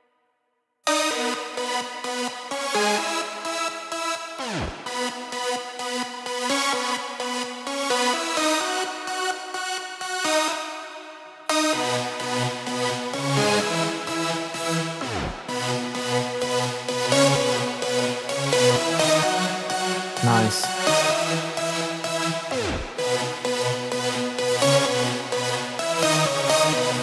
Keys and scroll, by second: 0.8 space, 10.4 super+space.